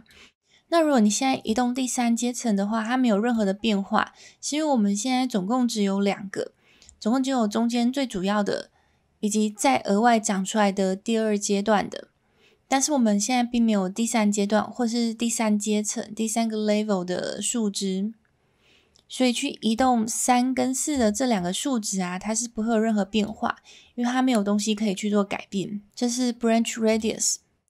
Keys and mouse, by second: 1.4-3.3 drag, 19.9-20.9 drag, 21.4-23.3 drag, 27.0-27.6 drag.